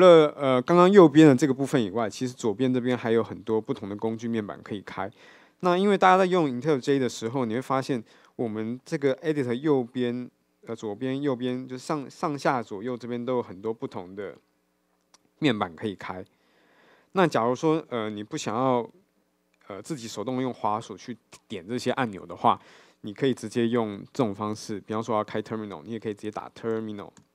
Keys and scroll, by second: 2.4 Left.